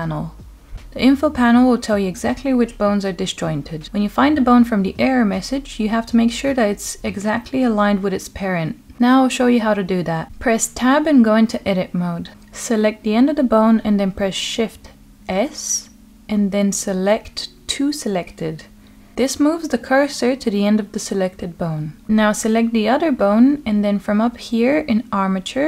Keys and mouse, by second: 2.6 click, 4.4-5.0 middle drag, 9.9 Tab, 15.2 shift+s, 23.5 shift+click, 24.7-25.6 drag.